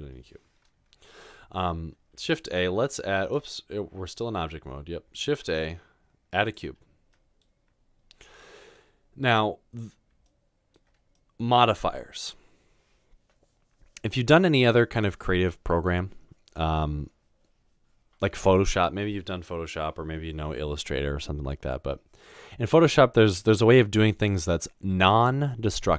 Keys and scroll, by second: 2.2 typing, 5.2-6.4 typing.